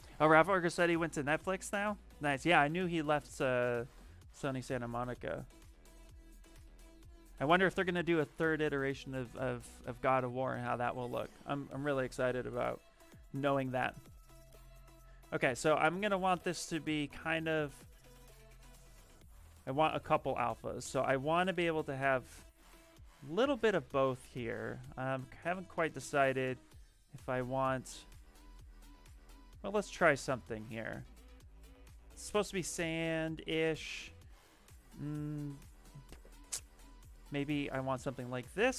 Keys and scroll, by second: 4.3 shift+f, 4.6 shift+f, 5.9 s, 7.0 s.